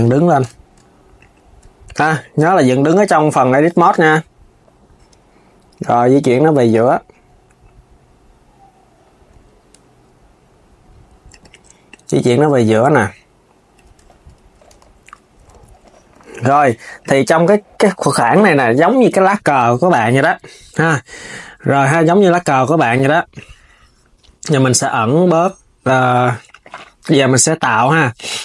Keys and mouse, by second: 1.7 r, 4.3 KP_1, 5.6 click, 11.5 click, 13.7 Tab, 14.4 KP_2, 15.9 s, 16.7 click, 18.8 KP_3, 20.9 s, 23.0 click, 27.2 click.